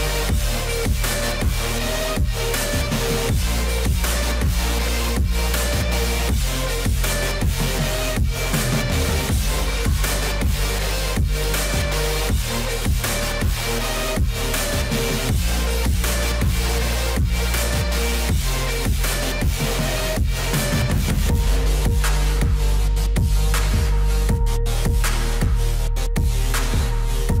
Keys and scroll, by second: 10.6 F4, 16.1 F4.